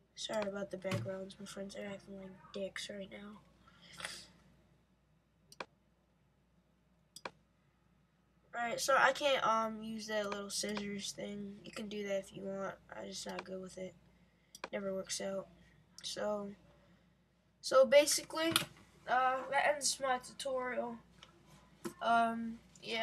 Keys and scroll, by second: 21.9 Left.